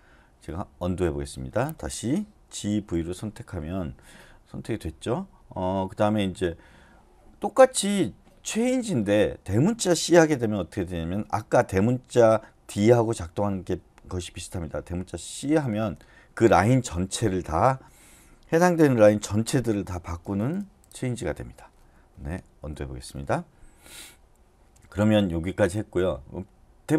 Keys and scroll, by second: 2.3-3.0 typing, 15.4 shift+c, 20.2-21.4 typing, 21.9 Escape, 22.6 u.